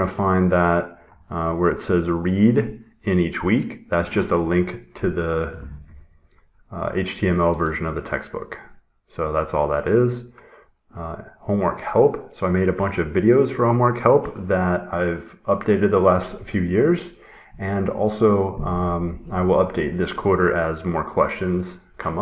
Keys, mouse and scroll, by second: 0.4 scroll down 2, 0.8 scroll, 0.9 scroll down 1, 0.9 scroll, 2.3 scroll, 6.0 scroll, 7.7 scroll.